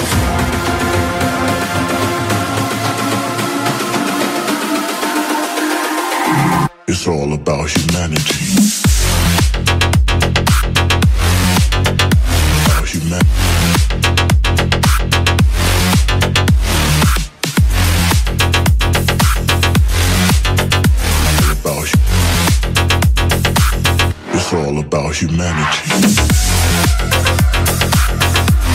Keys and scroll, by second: 24.8 shift+/, 27.4 space.